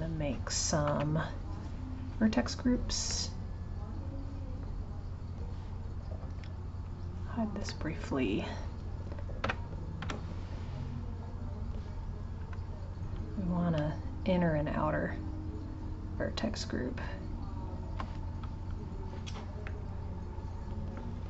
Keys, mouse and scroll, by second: 3.1-6.1 middle drag, 6.8 click, 7.6-9.4 middle drag, 9.4 2, 11.2 click, 14.2 ctrl+click, 15.6 ctrl+click, 19.7 shift+middle click, 20.3-21.2 scroll up 3.